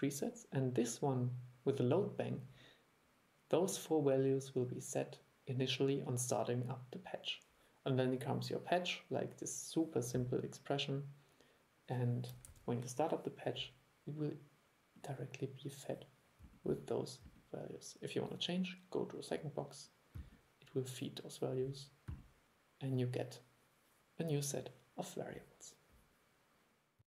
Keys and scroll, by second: 12.6 super+e.